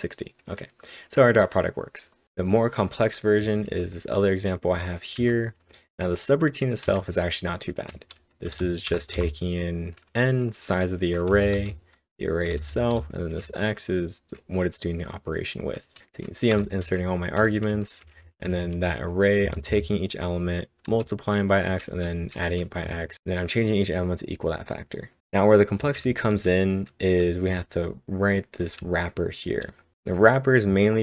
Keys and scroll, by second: 2.2 typing, 3.4-5.7 typing, 7.7-9.2 typing, 12.5-13.4 typing, 17.2-19.7 typing, 25.6-30.2 typing.